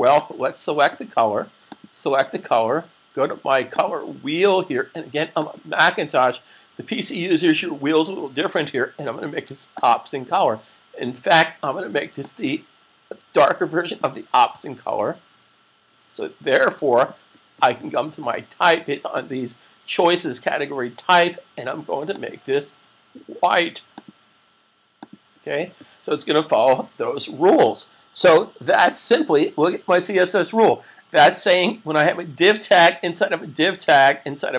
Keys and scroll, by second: 26.6 super+s.